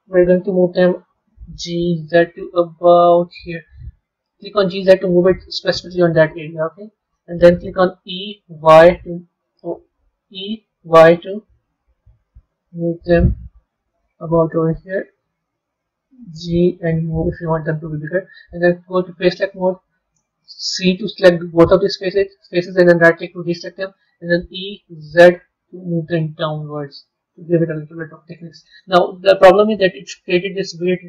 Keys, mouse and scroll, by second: 0.0-1.4 middle drag, 6.2-7.9 middle drag, 13.3-13.7 scroll down 2, 13.9-16.2 middle drag, 19.1 click, 27.6-30.0 middle drag, 30.0-30.8 scroll up 2, 31.0 middle click.